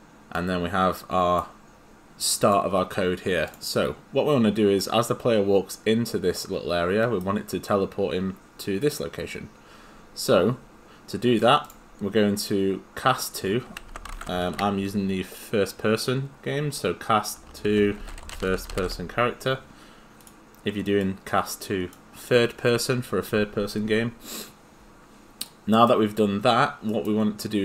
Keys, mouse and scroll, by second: 0.9 click, 2.3 click, 3.5 click, 4.8 right click, 13.6-14.9 typing, 17.4-19.3 typing, 20.2 click, 25.8 right click.